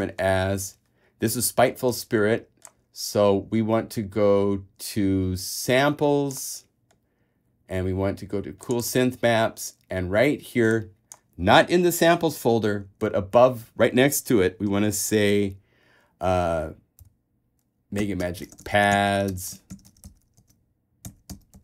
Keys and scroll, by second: 17.2 shift+m, 18.4-21.6 typing.